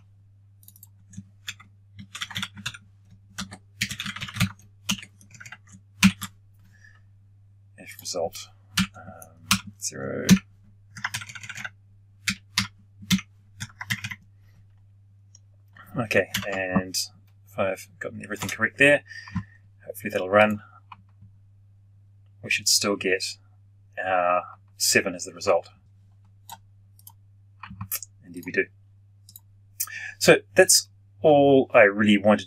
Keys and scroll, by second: 5.9 ctrl+alt+shift+p, 16.2 ctrl+F9.